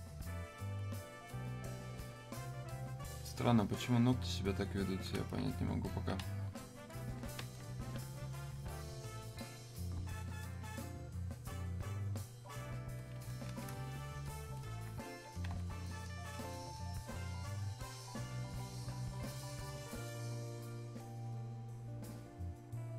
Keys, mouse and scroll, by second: 7.6 alt+click, 10.6-14.9 alt+drag, 17.7-22.9 drag.